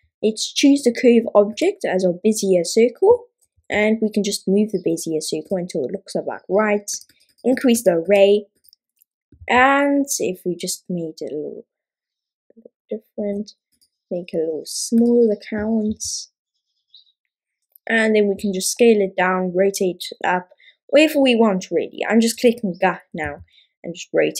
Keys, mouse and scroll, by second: 7.1-13.9 drag, 15.1-22.6 drag, 23.2 r.